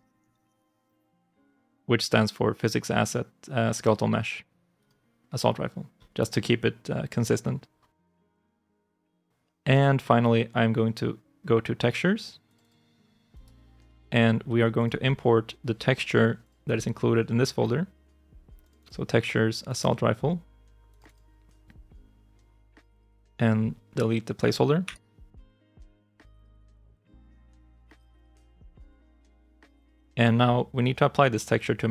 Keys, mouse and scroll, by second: 7.9 ctrl+shift+s, 12.5 double click, 13.2 right click, 18.6 double click, 24.7 Delete, 27.8 ctrl+shift+s.